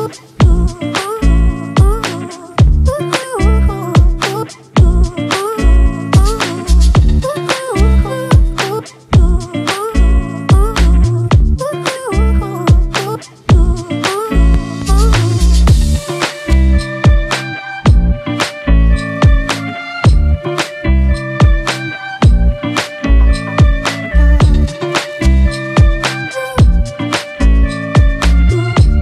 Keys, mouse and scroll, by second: 1.0 ], 1.2 ], 1.4 ], 1.7 double click, 2.0 [, 2.5 double click, 13.4 double click.